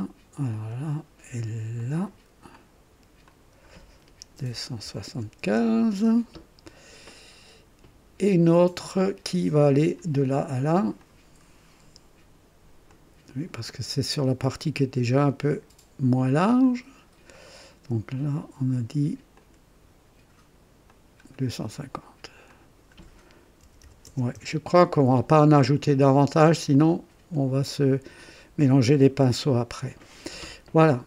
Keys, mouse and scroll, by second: 0.5 click, 1.7 click, 3.2 click, 4.4 KP_2, 4.8 KP_7, 5.1 KP_5, 5.4 Return, 10.9 click, 12.8 click, 16.6 click, 17.3 right click, 19.3 click, 20.8 click, 22.4 click, 23.6 KP_2, 23.8 KP_5, 24.0 KP_0, 24.3 Return, 26.7-27.5 drag.